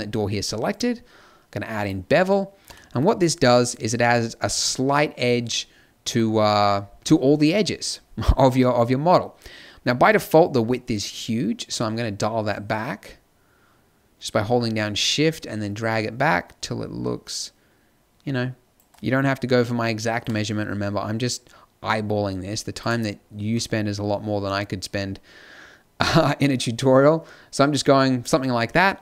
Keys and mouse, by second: 2.1 middle click, 20.1 click, 23.1 middle click.